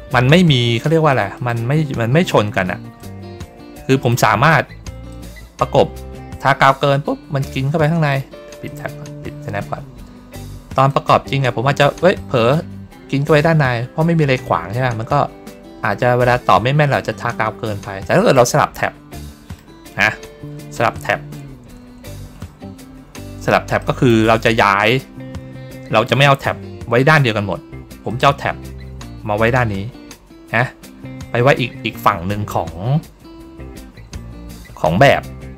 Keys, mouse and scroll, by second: 1.2 click, 2.9-4.0 drag, 5.0-7.7 drag, 8.5 click, 10.8-18.2 drag, 18.5 ctrl+middle click, 18.5 ctrl+scroll down 1, 19.1-20.2 middle drag, 19.5-20.2 scroll down 1, 23.0 ctrl+scroll down 1, 23.7 middle click, 28.0 click, 33.6 ctrl+scroll down 1, 34.8 ctrl+middle click.